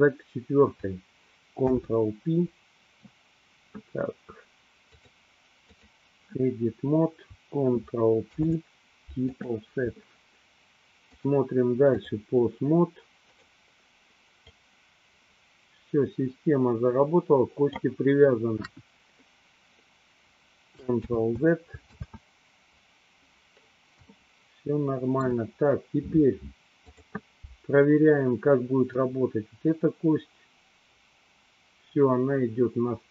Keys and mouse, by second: 1.5 ctrl+p, 5.0-6.1 drag, 8.2 ctrl+p, 11.4-12.3 drag, 13.3 click, 14.5-18.1 drag, 18.9 KP_1, 21.1 ctrl+z, 22.1 ctrl+z, 24.2-25.5 shift+middle drag, 26.8 click, 29.1-33.1 drag.